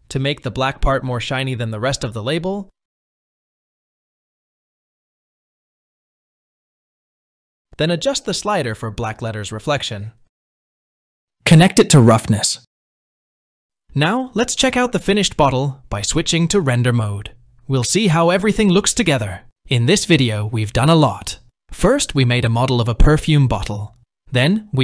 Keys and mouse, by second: 2.2 r, 5.9-6.3 shift+middle drag, 7.4-10.5 drag, 11.8-13.3 drag, 16.6 middle click, 21.3 KP_1.